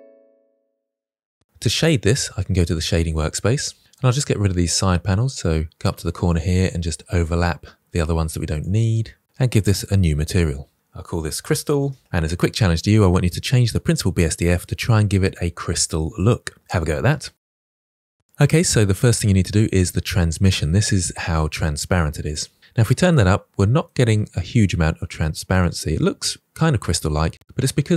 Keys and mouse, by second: 6.2-7.2 drag, 8.3 click, 9.6-11.3 drag, 11.6 middle click, 11.9 middle click, 19.7 click, 20.7-22.2 drag, 23.0-23.8 middle drag, 24.5-25.0 middle drag, 25.5-27.4 middle drag.